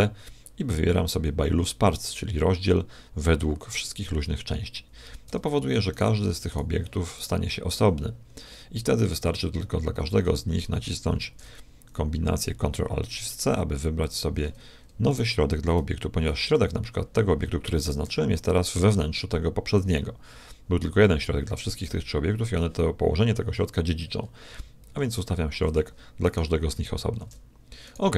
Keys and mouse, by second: 5.3 Tab, 5.9-9.1 right drag, 11.1 ctrl+alt+shift+c, 15.1-16.9 right drag, 18.0 g, 24.8 ctrl+alt+shift+c, 26.3-27.5 right drag, 27.1 ctrl+alt+shift+c, 27.5 a, 27.9-28.1 right drag.